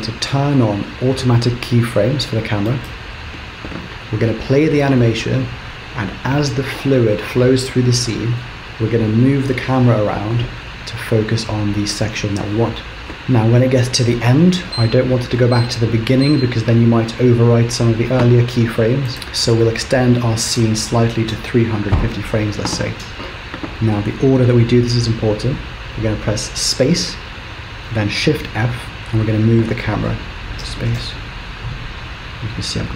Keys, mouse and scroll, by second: 2.7 click, 19.1 click, 30.7 space, 31.0 shift+f.